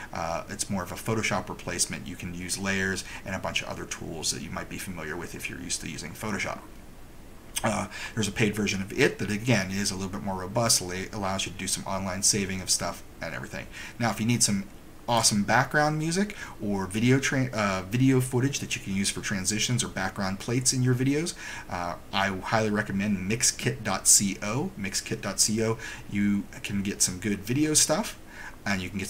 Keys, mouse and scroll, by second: 15.3 click.